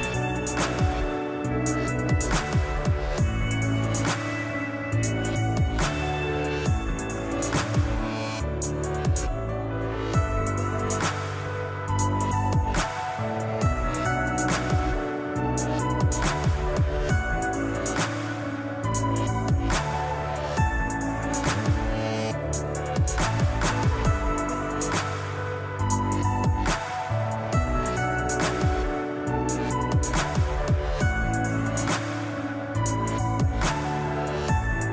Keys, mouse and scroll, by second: 1.1 g, 2.3-4.5 middle drag, 3.6 g, 4.5 click, 5.6 g, 7.1 click, 7.7 click, 9.3 g, 10.7 click, 10.8 scroll down 1, 11.1 shift+middle click, 11.4-11.9 scroll up 2, 11.9 click, 12.3 ctrl+click, 13.5 g, 15.1 click, 15.6 ctrl+click, 16.4 g, 17.7 click, 18.3 ctrl+click, 19.2 g, 19.8 click, 20.0 shift+middle click, 20.9 click, 21.3 ctrl+click, 22.5 g, 25.4 click, 26.0 click, 26.9 g, 27.8 click, 28.2 Tab, 28.3 scroll down 2, 28.7-29.2 middle drag, 29.4 middle click, 29.8-31.3 middle drag, 29.9-30.8 scroll up 2, 30.8-31.3 scroll up 1, 31.3-34.4 drag, 34.4-34.9 middle drag.